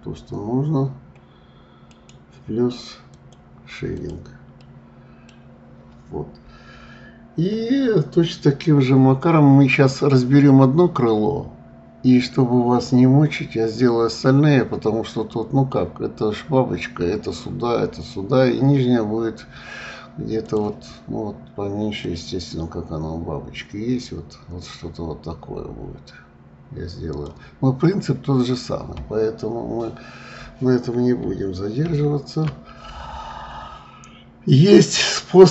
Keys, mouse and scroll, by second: 0.3-1.9 scroll up 3, 1.9 right click, 3.2 right click, 3.9 click, 4.6-5.4 middle drag, 5.4-6.3 scroll down 6, 9.3-11.6 scroll up 3, 14.9-15.4 scroll down 5, 20.4-25.1 drag, 28.9 scroll up 2, 29.7-31.9 scroll up 4, 31.9 ctrl+z.